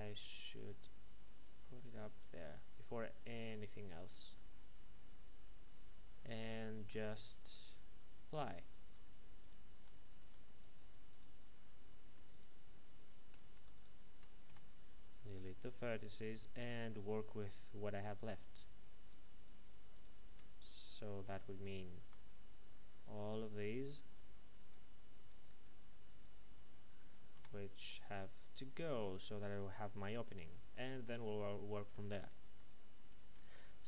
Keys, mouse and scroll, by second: 0.6 click, 4.3 middle click, 8.1 click, 8.8 Tab, 9.4 right click, 9.7 Tab, 10.5 right click, 13.4-14.4 typing, 15.1 click, 15.8 middle click, 18.1 right click, 19.0 shift+right click, 21.5 ctrl+right click, 23.7 shift+right click, 27.3 x, 28.0 click, 28.8 middle click.